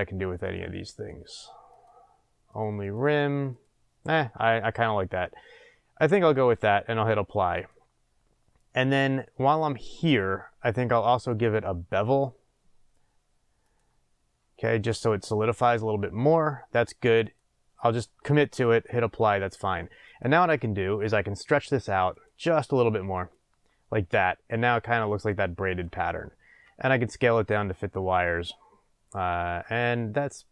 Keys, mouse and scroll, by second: 0.4 click, 0.9 click, 1.7 click, 2.5 click, 2.8 click, 3.5 click, 7.5 click, 9.1 scroll up 1, 9.6 scroll down 1, 11.1-17.7 drag, 19.2 scroll down 1, 20.0 click, 22.1-27.9 drag, 26.6 s.